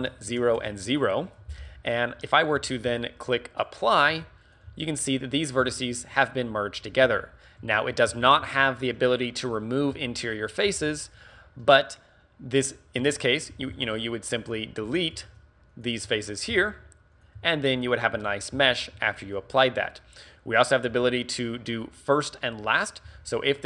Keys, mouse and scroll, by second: 5.6 e, 18.2 right click.